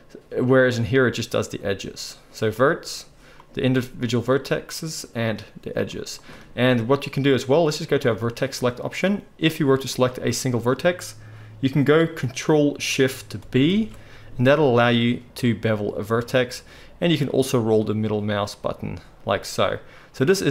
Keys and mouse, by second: 0.9 click, 1.0-2.5 middle drag, 2.5 click, 2.6-5.2 middle drag, 5.2 click, 5.3-8.0 middle drag, 8.0-10.0 drag, 10.0-20.5 middle drag.